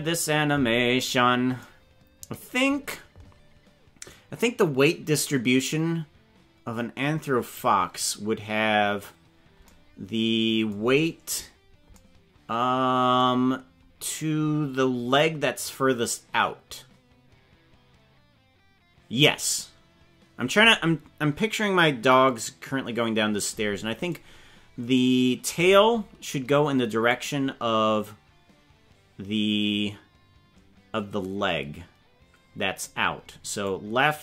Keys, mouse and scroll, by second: 7.3 scroll down 4, 27.1-32.8 drag, 33.6-34.2 drag.